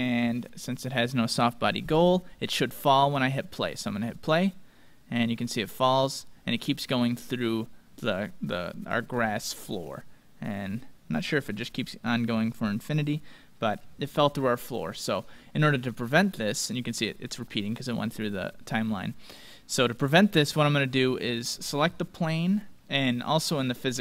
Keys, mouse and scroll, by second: 2.9-6.0 drag, 9.1-11.1 middle drag, 11.4-12.3 scroll down 1, 12.3-16.2 middle drag, 14.0-14.4 scroll up 1, 19.3-21.9 drag, 21.2-23.2 right drag.